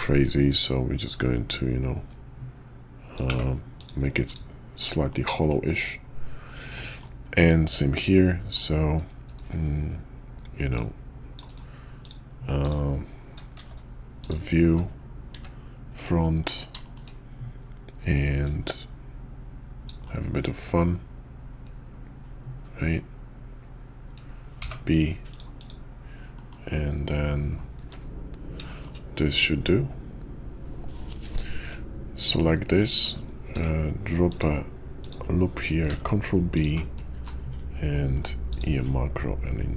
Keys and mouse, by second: 5.1-5.5 middle drag, 6.7 middle drag, 8.1-8.5 drag, 8.5 right click, 10.7-11.5 drag, 12.0 click, 12.6 click, 13.5 shift+v, 15.3 `, 16.1 KP_5, 16.4 KP_5, 16.8 shift+click, 18.4-25.4 drag, 26.3 middle click, 28.7 shift+middle drag, 28.8 shift+drag, 32.2 Tab, 33.5 ctrl+r, 35.7 ctrl+b, 37.1 q.